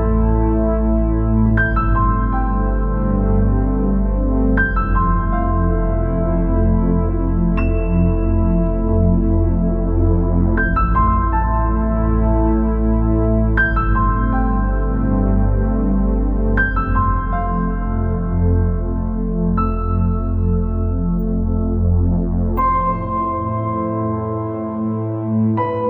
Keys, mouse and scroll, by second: 3.8 shift+d, 9.4 scroll down 2, 9.6-11.7 middle drag, 11.7 scroll down 1, 11.8 middle click, 12.6 scroll up 3, 13.9 scroll down 1, 14.0-15.9 middle drag, 15.9 shift+d, 20.5 scroll down 1, 20.6 middle click, 21.2-21.8 scroll up 6, 23.3 KP_0, 24.8 KP_0, 25.5 KP_0.